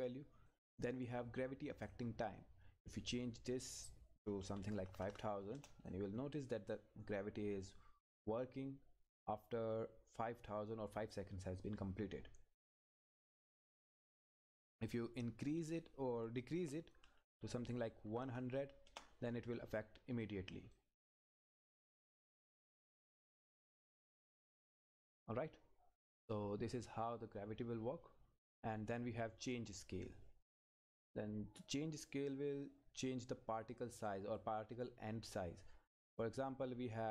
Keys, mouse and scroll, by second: 0.5-5.2 drag, 5.5 Return, 5.9-12.8 drag, 12.8-14.6 scroll down 1, 14.9 click, 18.8 Return, 20.7 click, 26.7 click, 30.8 click, 35.9-37.1 scroll down 1.